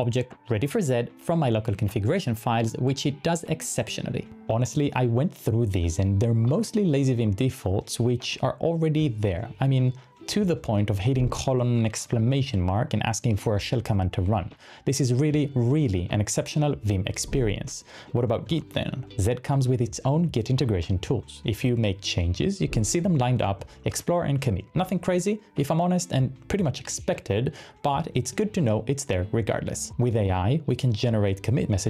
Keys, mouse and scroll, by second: 0.0-1.2 typing, 4.4 typing, 6.4-9.2 typing, 17.4 Return, 18.8 j, 22.0 j.